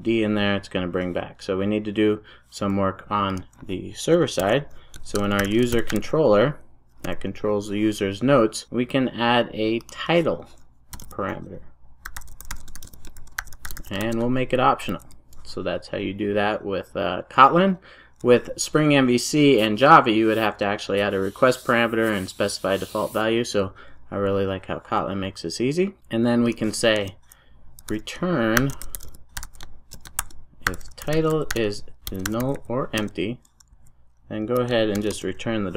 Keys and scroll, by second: 4.3 ctrl+shift+super+o, 14.9 super+s, 33.0 Return.